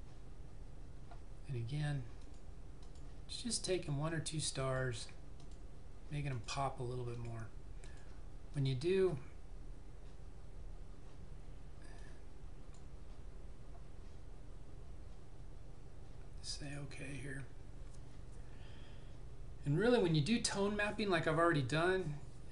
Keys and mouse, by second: 2.3 click, 12.0 click, 16.7 click.